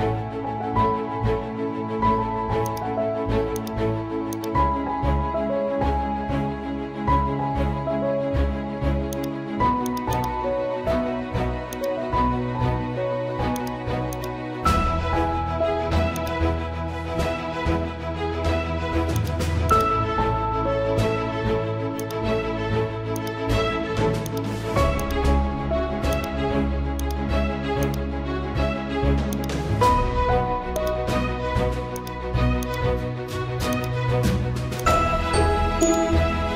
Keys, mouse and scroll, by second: 1.1-2.3 typing, 2.7 click, 5.0 scroll up 1, 9.1-19.2 drag, 9.1 typing, 19.4-20.2 typing, 22.0 click.